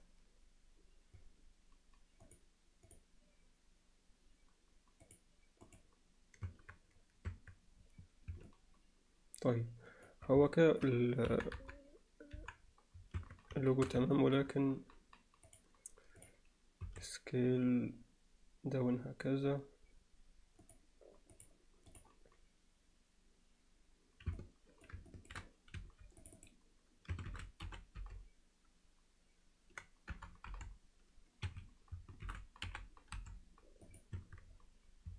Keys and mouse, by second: 5.1-5.8 drag, 6.6 Tab, 7.9 Tab, 8.5-10.1 alt+middle drag, 10.5 alt+middle click, 11.3 KP_1, 11.6 KP_3, 12.4 KP_1, 13.3 Tab, 13.7 alt+shift+middle click, 14.2 ctrl+alt+middle click, 15.5-16.3 drag, 21.4 click, 24.4 alt+click, 24.5 alt+middle click, 25.1 ctrl+alt+middle click, 25.9 2, 26.3 click, 27.3 shift+e, 32.4 shift+e, 34.8 Tab.